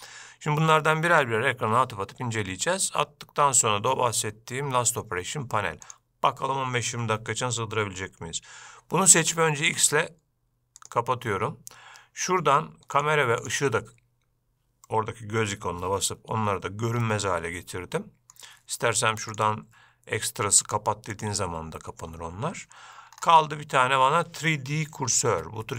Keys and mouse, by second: 6.0 click, 9.8 x, 13.1 click, 13.6 click, 17.2-18.5 middle drag, 19.5-21.6 drag.